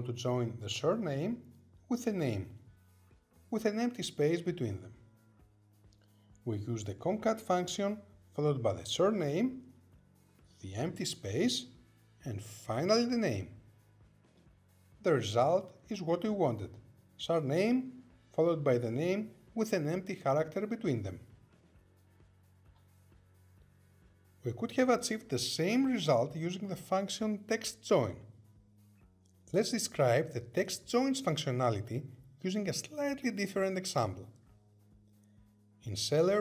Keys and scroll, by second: 4.0 Tab, 17.0 Return.